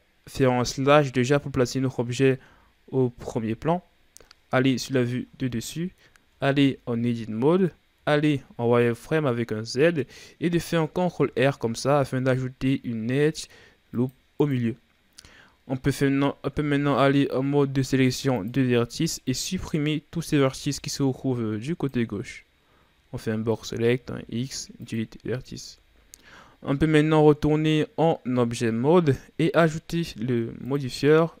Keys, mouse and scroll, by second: 1.1 KP_7, 2.3 KP_7, 3.4 KP_Divide, 6.3 Tab, 8.0 z, 11.1 ctrl+r, 15.4-16.5 ctrl+scroll down 2, 16.5 ctrl+Tab, 19.2 right click, 20.5 b, 23.9 x, 25.6 Tab, 26.8-29.8 ctrl+scroll up 3, 30.6-31.4 drag.